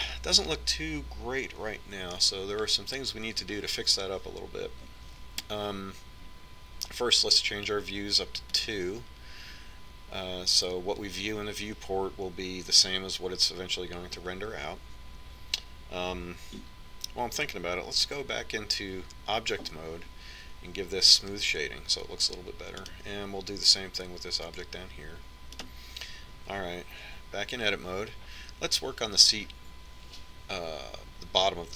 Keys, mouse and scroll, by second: 0.1-2.2 middle drag, 2.4-4.1 middle drag, 8.8-14.6 drag, 18.5 Tab, 21.5-23.2 drag, 23.2-24.8 middle drag, 24.8 right click, 24.8-26.6 middle drag, 26.6-30.1 right drag, 26.9 Tab.